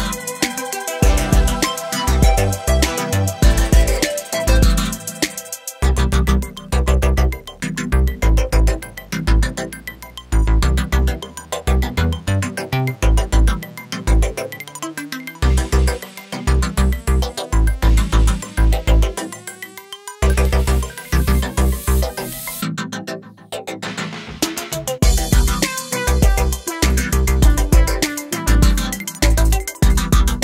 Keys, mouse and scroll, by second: 0.0-0.7 middle drag, 0.7 scroll down 3, 0.8-2.2 middle drag, 2.2 scroll up 1, 2.5-4.0 middle drag, 4.0 scroll up 2, 4.1 shift+middle click, 4.4 Tab, 6.7 2, 7.1-8.5 alt+drag, 8.5 g, 12.6-13.8 middle drag, 14.1 Tab, 14.3 middle click, 14.8 Tab, 15.7 click, 16.1 middle click, 16.5 shift+click, 17.3 g, 19.0-20.3 drag, 22.4-23.7 middle drag, 24.7 middle click, 25.2 ctrl+z, 25.7 alt+click, 26.2 middle click, 27.1 g, 28.5 middle click, 29.2 ctrl+z, 29.4 ctrl+z, 29.9 Tab, 30.1 scroll down 3, 30.2-30.4 middle drag.